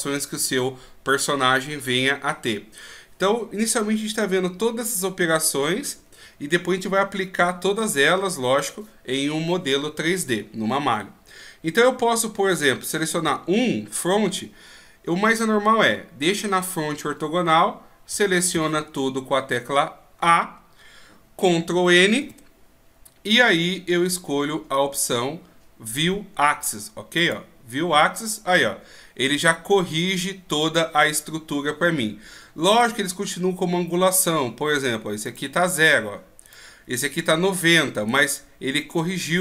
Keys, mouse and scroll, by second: 13.3 KP_1, 18.1 a, 18.5 a, 22.2 ctrl+n, 32.7 right click, 34.1 right click.